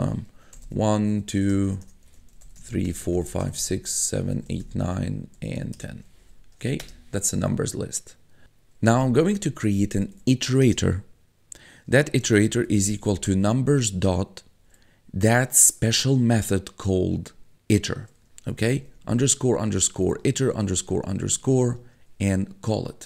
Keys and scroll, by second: 0.0-6.7 typing, 6.8 Return, 8.7-10.6 typing, 12.0-13.8 typing, 18.7-21.0 typing.